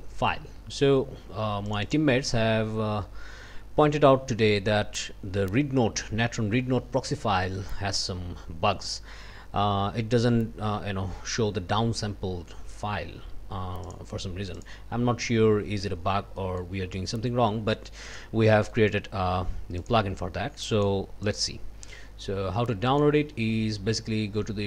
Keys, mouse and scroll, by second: 1.7 click, 13.8 click, 14.6 click, 16.4 click, 18.1 click, 18.5 click, 19.8 click, 20.7 click, 21.2 click, 22.9 click, 24.3 scroll up 2.